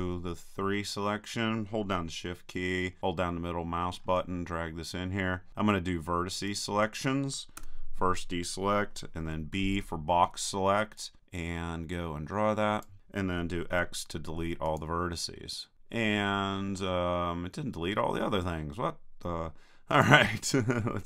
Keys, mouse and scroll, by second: 0.9-3.7 middle drag, 5.2-6.5 middle drag, 6.5-8.4 drag, 7.6 a, 9.3 b, 13.8 x, 19.9-21.0 drag.